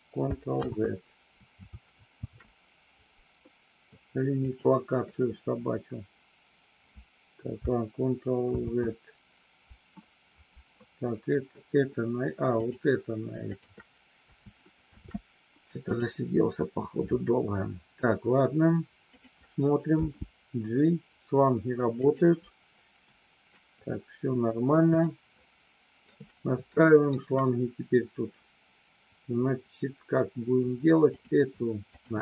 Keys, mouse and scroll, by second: 0.7 ctrl+z, 2.1 ctrl+shift+c, 8.5 ctrl+z, 12.5 click, 13.5 shift+click, 14.8 ctrl+shift+c, 19.1 click, 19.9 g, 21.9 click, 25.1-26.2 shift+middle drag, 26.9 shift+middle click, 32.1 shift+click.